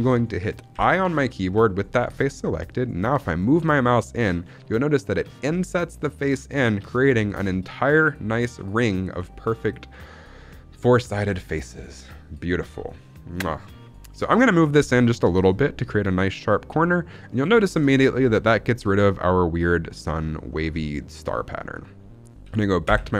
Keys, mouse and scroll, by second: 0.7 i, 17.2 click, 17.5 shift+middle click, 17.8 scroll up 3, 18.1 shift+middle click, 18.5-18.8 scroll down 2, 20.6 scroll down 3, 20.7 shift+middle click, 21.0 scroll up 1, 21.2 middle click, 22.8 KP_1.